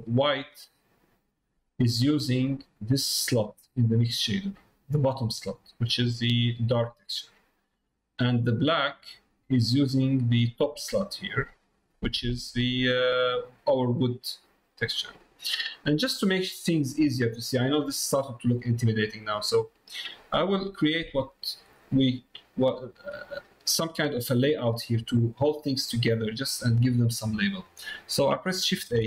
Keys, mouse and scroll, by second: 1.7 middle click, 2.6 middle click, 3.4 middle click, 6.1 middle click, 7.3 middle click, 7.7 middle click, 9.7 middle click, 11.3 middle click, 12.4 middle click, 13.4 middle click, 15.0 middle click, 15.9 middle click, 16.4 middle click, 17.7 middle click, 18.3 middle click, 19.2 middle click, 20.1 middle click, 20.5 middle click, 21.3 middle click, 22.4 middle click, 23.8 middle click, 26.7 middle click, 27.4 middle click.